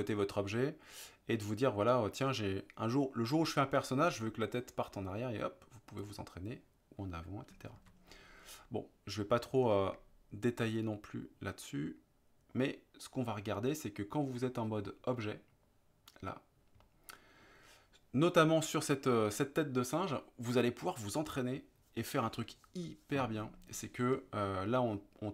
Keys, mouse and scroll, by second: 6.1 click, 7.8 ctrl+z, 14.3 click, 15.3-15.7 middle drag, 16.9-17.4 middle drag, 24.9-25.3 middle drag.